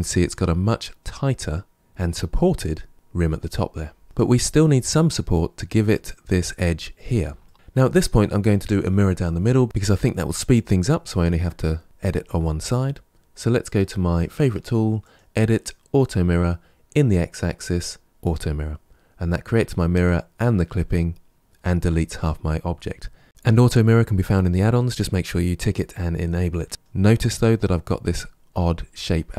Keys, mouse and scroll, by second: 4.0-6.6 shift+middle drag, 7.3 shift+middle click, 14.9 click, 18.1 click, 23.2-26.9 middle drag, 26.9-28.9 scroll up 5.